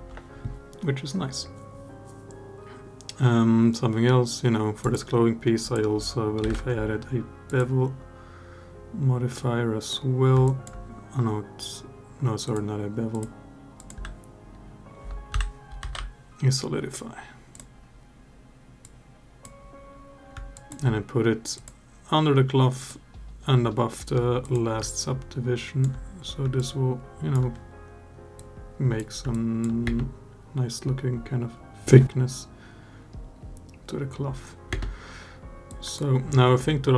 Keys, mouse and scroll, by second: 4.6-7.4 drag, 9.1-9.7 drag, 10.2 alt+drag, 12.2 drag, 12.9-17.4 drag, 18.6-19.2 drag, 20.3 alt+click, 21.3 click, 22.6 click, 24.8-25.6 alt+drag, 26.3-27.1 alt+drag, 28.2-28.8 drag, 29.1-29.4 alt+drag, 29.6 space, 34.6 space, 35.5-35.8 drag, 36.7 alt+drag.